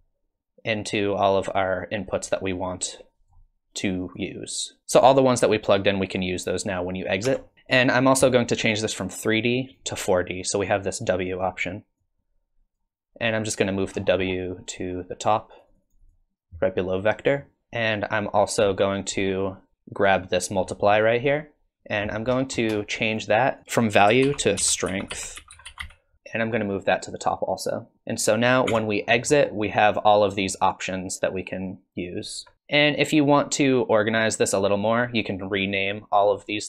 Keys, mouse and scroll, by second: 2.2 click, 4.1 click, 7.2 Tab, 8.7 click, 12.0 click, 13.9-14.8 scroll down 10, 14.6-15.8 click, 15.5 click, 15.7 click, 16.0 click, 17.6 middle click, 17.6 scroll down 4, 18.4 click, 20.7 middle click, 21.1-21.6 scroll up 3, 22.2-23.0 scroll down 27, 23.0 click, 23.6 click, 26.8-27.1 click, 27.0 click, 27.3 click, 27.6 click, 27.9 middle click, 27.9-28.5 scroll down 3, 28.7 Tab, 29.0-30.3 scroll up 6, 30.4 shift+click, 34.6 click.